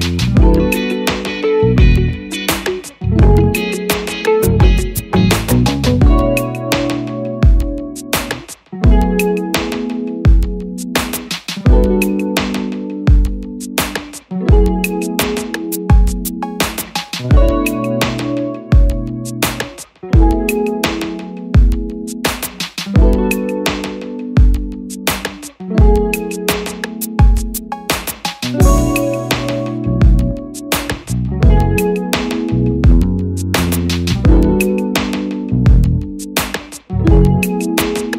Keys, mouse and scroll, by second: 2.3 click, 9.9 double click, 13.6 Return, 28.2 double click.